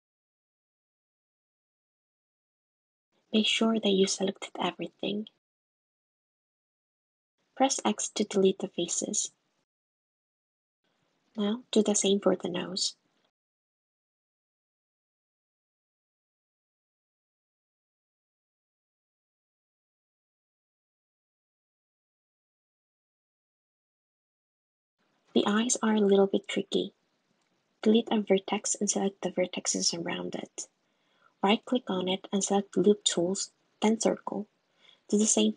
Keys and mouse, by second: 1.7 shift+click, 3.1 shift+click, 6.7 x, 13.0 1, 13.7 k, 14.3 k, 22.2 x, 24.6 super+z, 25.9 x, 27.4 click, 29.3 s, 32.2 middle click, 32.9 x, 33.6 middle click, 33.7 middle click, 34.6 click, 34.8 s.